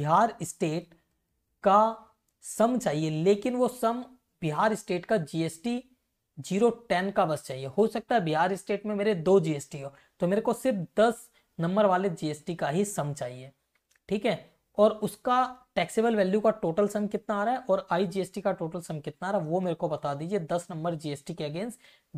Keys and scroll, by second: 0.4 Right, 4.5 Right, 7.8 Left, 10.0 Right, 13.8 Right, 19.4 Left.